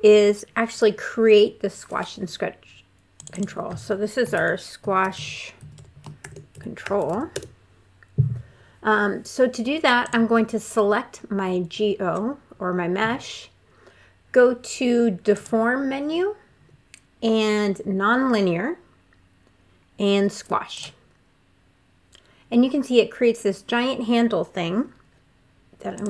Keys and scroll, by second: 4.1-6.9 typing, 7.1 Return.